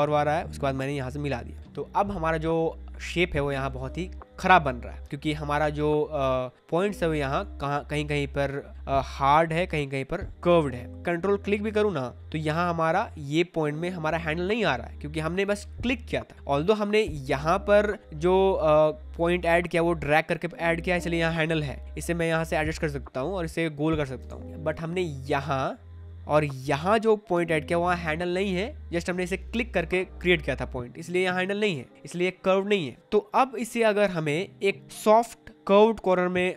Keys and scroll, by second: 24.2 ctrl+z.